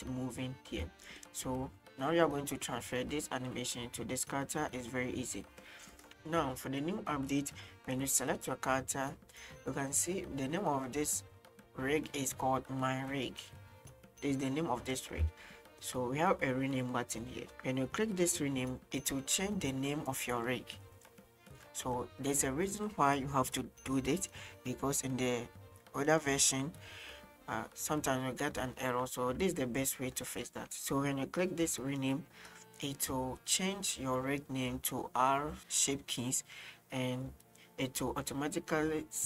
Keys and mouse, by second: 1.1 shift+middle drag, 6.1 ctrl+z, 7.4-10.8 right drag, 15.5-15.9 shift+middle drag, 32.2 click.